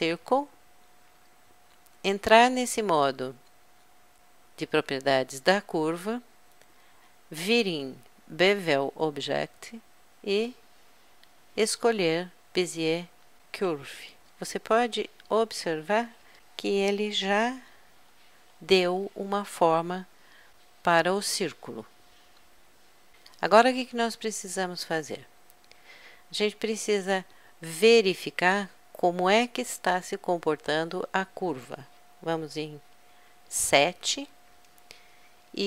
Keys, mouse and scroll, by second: 4.2-5.9 drag, 5.9-10.0 middle drag, 10.9 click, 11.8-15.2 middle drag, 15.3 middle click, 15.5-18.0 middle drag, 18.0 KP_Add, 18.4 KP_Add, 18.9 KP_Add, 33.4 KP_7.